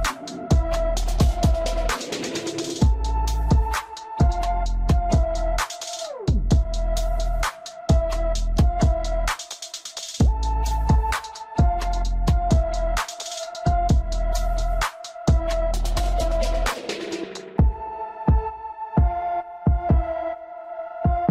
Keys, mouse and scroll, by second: 4.7 drag, 5.4 click, 7.1 Tab, 8.0-9.3 shift+middle drag, 9.3 scroll down 1, 9.5-12.5 middle drag, 12.5-13.0 scroll up 1, 13.0 scroll down 1, 13.3-14.9 scroll up 1, 14.9-16.4 scroll up 1.